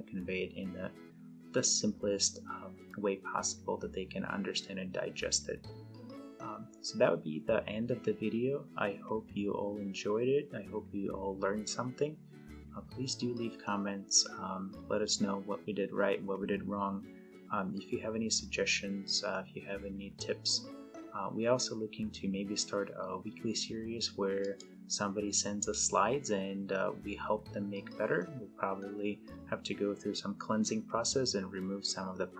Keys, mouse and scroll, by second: 24.5 click.